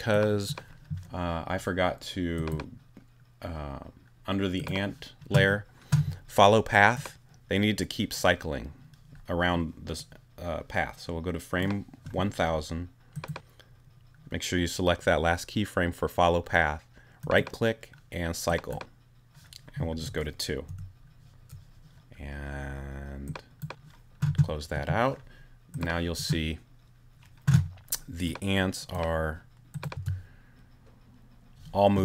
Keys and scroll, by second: 20.7 2, 30.0 space.